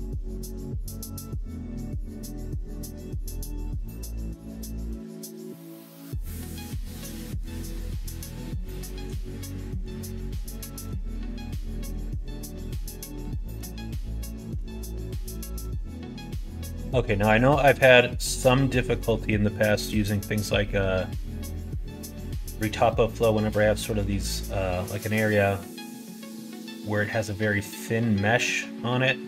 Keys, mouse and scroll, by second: 0.8 Tab, 4.2 click, 5.4 click, 5.9 middle click, 6.5 middle click, 7.2 middle click, 7.5 middle click, 8.3 middle click, 8.6 shift+middle click, 9.2 middle click, 9.6 middle click, 10.0 shift+middle click, 10.7 middle click, 11.3 middle click, 12.2 click, 13.3 middle click, 14.1 middle click, 15.2-16.7 middle drag, 16.9 middle click, 18.0 middle click, 18.8 middle click, 19.7 middle click, 20.9 middle click, 21.5-23.1 middle drag, 24.0 middle click, 25.1 middle click, 26.2-29.2 middle drag.